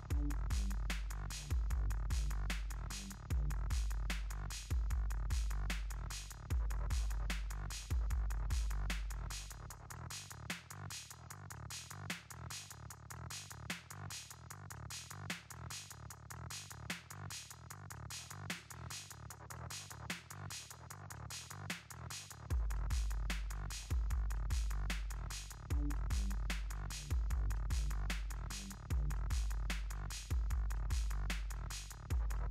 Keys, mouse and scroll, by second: 1.0 click, 4.4 click, 7.1 click, 11.6 click, 26.8 click, 27.2 right click, 28.1 click, 31.0-32.5 typing.